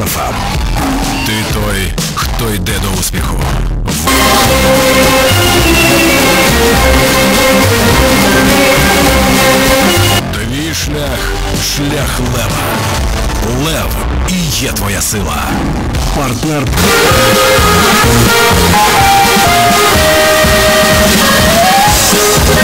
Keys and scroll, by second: 10.2 Page_Down.